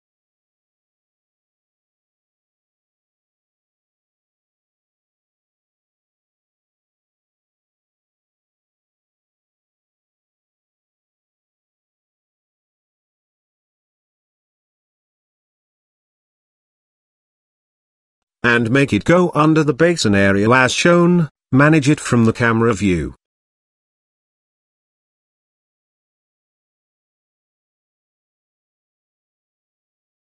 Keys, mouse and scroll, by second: 2.8 click, 4.3 shift+click, 6.3 shift+click, 6.9 z, 8.1-9.4 shift+drag, 10.4-12.0 middle drag, 13.0 middle click, 13.4 middle click, 14.2 KP_0, 14.6 middle click, 15.0 shift+middle click, 15.8 shift+middle click, 16.8 g, 20.3 scroll up 1, 20.6 z, 21.2-21.6 shift+scroll up 1, 22.0 shift+middle click, 23.3-23.7 scroll up 1, 24.5 g, 25.9 KP_0, 26.9 g.